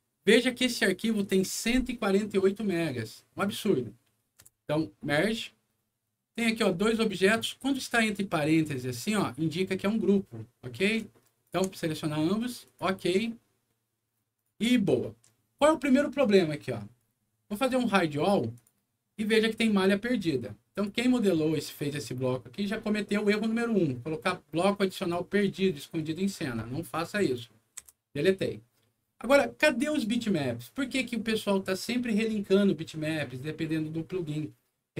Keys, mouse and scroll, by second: 0.6 click, 4.3 Return, 6.2 click, 7.1 click, 7.9 click, 8.7 click, 11.3 ctrl+click, 12.5 ctrl+click, 14.3 ctrl+click, 17.4 right click, 18.4 click, 20.6 click, 21.8-22.2 scroll up 2, 22.2 middle click, 24.9 click, 27.1 click, 27.7 Delete, 28.7 middle click.